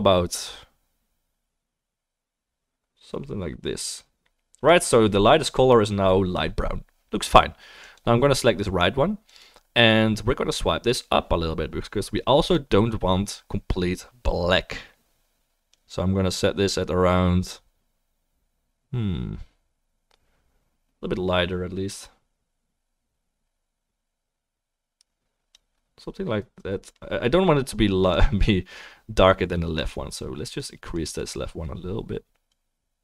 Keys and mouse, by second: 7.9-9.4 drag, 7.9-9.4 middle drag, 24.3-32.7 middle drag, 28.9-33.0 right drag, 30.5 click.